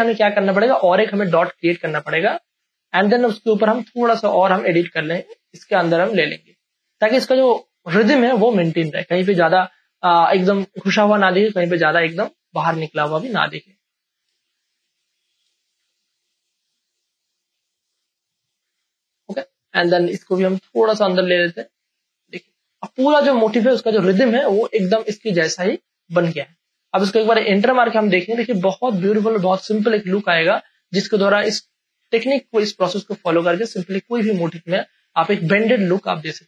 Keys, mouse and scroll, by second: 0.0 space, 0.2 ctrl+click, 6.3 space, 6.5-14.3 ctrl+drag, 14.3 space, 14.5 click, 14.8 space, 16.4 click, 17.3 space, 17.6-22.4 ctrl+drag, 22.4 space, 22.6 click, 23.0 space, 23.2-29.5 ctrl+drag, 29.5 space, 29.7 ctrl+click, 30.8 ctrl+click, 33.6 '.